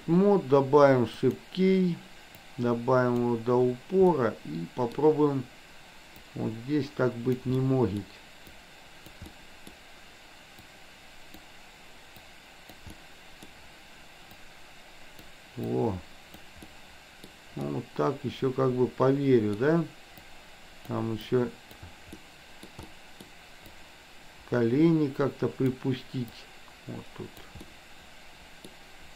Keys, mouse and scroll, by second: 1.3 click, 2.5 click, 4.1 middle click, 6.3-7.4 drag, 7.6 middle click, 8.5 click, 9.4 middle click, 10.6 click, 12.3 click, 13.0 middle click, 14.4-15.4 drag, 15.8 click, 16.6 middle click, 17.6-19.6 middle drag, 20.3 click, 21.3 click, 22.1 middle click, 22.9 middle click, 23.6-25.8 drag, 26.4-27.4 drag, 27.6-28.8 middle drag.